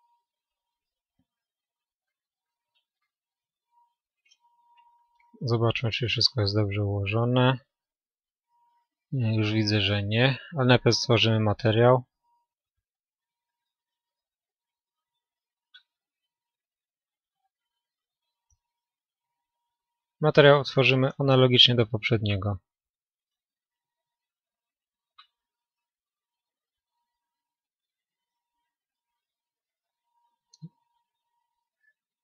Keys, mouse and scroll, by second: 4.3-14.1 middle drag, 14.1-30.3 drag.